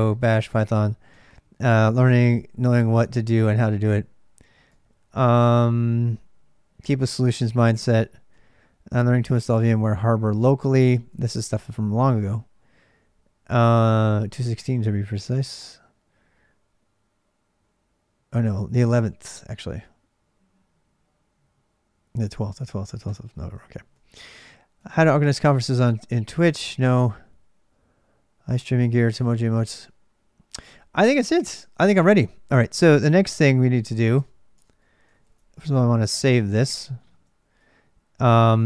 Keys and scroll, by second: 0.0-37.8 typing, 33.6 ctrl+[, 33.9 Return, 34.3 Return.